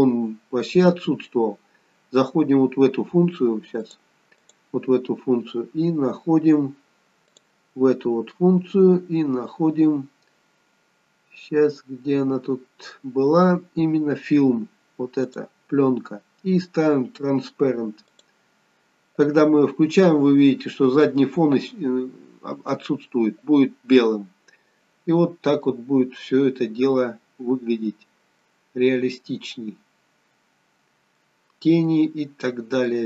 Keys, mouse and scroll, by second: 19.9 click.